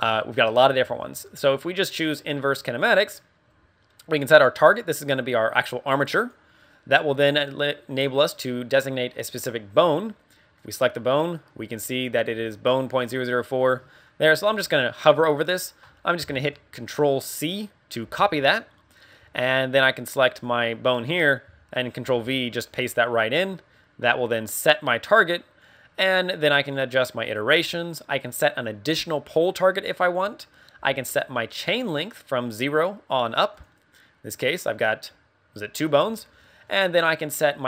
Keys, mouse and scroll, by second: 3.1 middle click, 4.5 click, 10.5 right click, 18.0 ctrl+c, 20.2 right click, 22.0 ctrl+v, 23.0 scroll down 3, 23.3 middle click, 24.1 scroll up 4, 24.8 middle click, 28.1 click, 32.4 click, 33.5 click, 35.9 scroll down 3, 36.3 middle click.